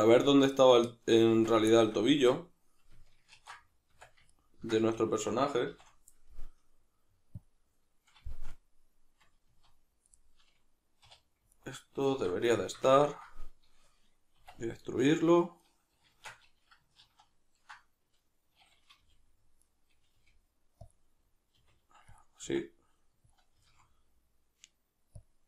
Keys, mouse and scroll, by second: 0.3 right click, 0.5 right click, 0.9 right click, 1.3 Tab, 1.7-3.3 shift+middle drag, 2.1 Tab, 3.3 ctrl+2, 3.9 Tab, 4.3 ctrl+middle click, 4.9 a, 5.7 shift+n, 7.4 click, 8.3-11.5 shift+middle drag, 9.5 z, 11.1 2, 11.5 alt+right click, 12.1 alt+q, 12.6-15.7 shift+middle drag, 14.4 e, 15.7 right click, 16.1 shift+Tab, 17.0 ctrl+z, 19.0 g, 19.7 right click, 20.2 g, 20.9 click, 21.6 r, 22.2 click, 22.4 s, 23.3 click, 23.6 g, 25.2 click.